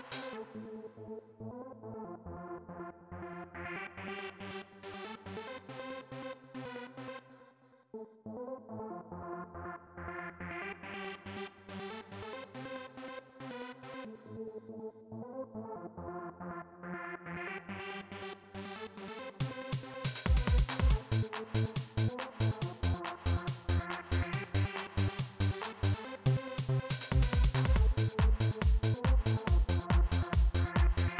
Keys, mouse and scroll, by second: 1.7 click, 3.1 click, 4.4 click, 6.6 click, 7.6 click, 14.5 click, 17.1-19.5 drag, 21.8 click, 26.5 click.